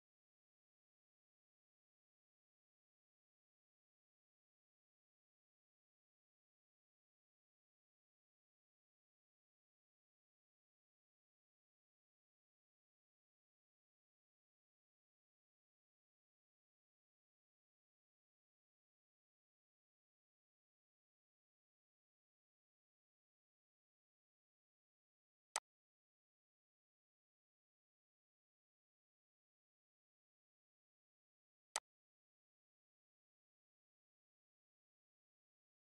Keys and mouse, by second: 19.0 v, 25.2 click, 31.4 click.